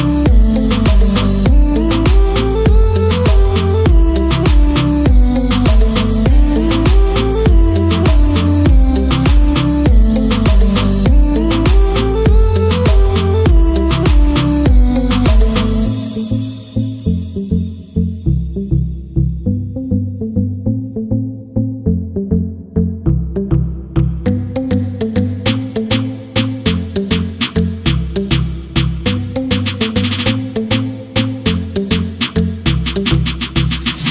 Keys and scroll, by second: 1.8-7.2 typing, 8.2 Return, 8.9-10.8 typing, 10.9 Return, 12.4-17.2 typing, 18.5-27.9 typing, 29.3-34.1 typing.